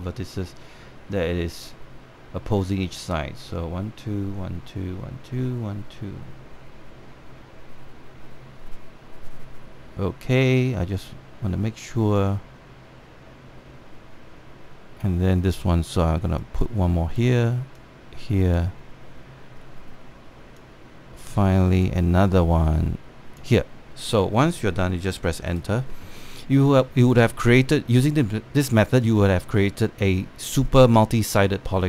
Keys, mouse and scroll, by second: 17.1-20.7 drag, 21.3-25.6 drag, 26.2 Return.